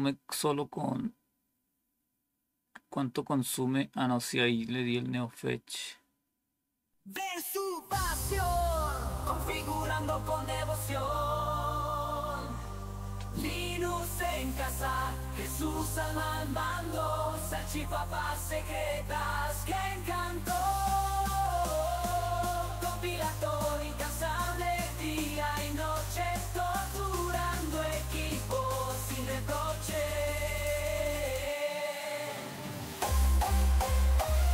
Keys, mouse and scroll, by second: 9.5 click.